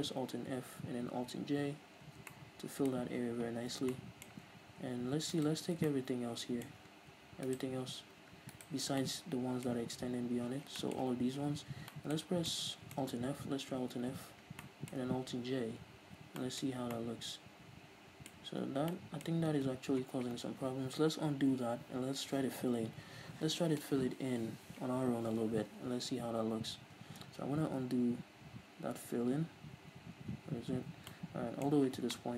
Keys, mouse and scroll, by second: 0.3 alt+f, 1.4 alt+j, 2.1 Tab, 2.3-5.3 middle drag, 3.3 Tab, 5.3 alt+right click, 5.7 scroll down 2, 5.9-7.5 shift+middle drag, 7.5-9.0 alt+shift+right drag, 9.0 shift+middle click, 9.8-10.2 scroll up 2, 10.2 scroll down 2, 10.4 z, 10.8-18.5 shift+middle drag, 11.4 z, 11.7 scroll up 1, 13.9 alt+f, 15.8 alt+j, 16.7 Tab, 18.5 Tab, 23.1 ctrl+z, 31.1 middle click.